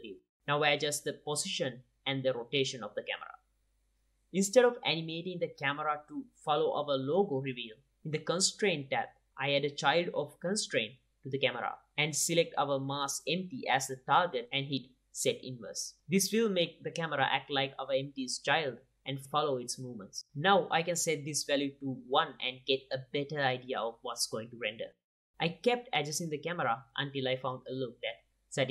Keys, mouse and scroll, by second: 1.9 g, 2.9 r, 3.7 g, 4.6 KP_0, 6.4-8.8 middle drag, 8.8-11.6 drag, 12.3-14.3 drag, 15.3-18.9 drag, 21.0 KP_0, 21.3 middle click, 21.6-22.7 drag, 23.0 click, 23.9-24.2 drag, 27.5 r, 28.2 drag.